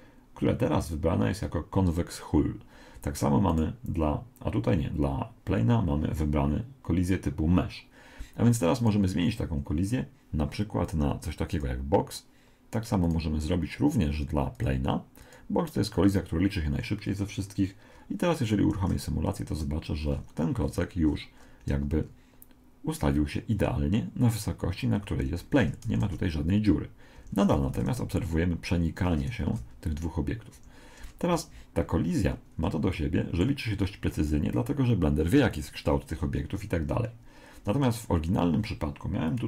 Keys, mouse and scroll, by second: 3.5 right click, 8.8 right click, 10.9 click, 13.1 right click, 14.5 click, 18.7 alt+a, 20.1-23.9 middle drag, 25.2 Escape, 26.0 alt+a, 27.2 Escape, 27.7 alt+a, 28.9 Escape, 29.5 alt+a, 30.5 Escape, 31.1-32.7 middle drag, 33.0-34.7 middle drag, 39.3 click.